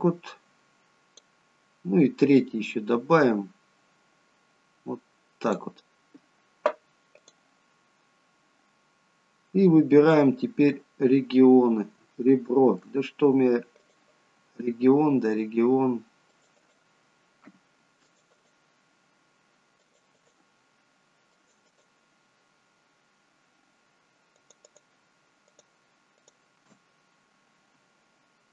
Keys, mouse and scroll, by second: 2.6 click, 7.2 click, 10.9-11.9 scroll up 2, 12.1 shift+middle click, 13.1-13.5 scroll up 1, 13.8 click, 18.0 alt+shift+click, 27.0-27.5 scroll up 1.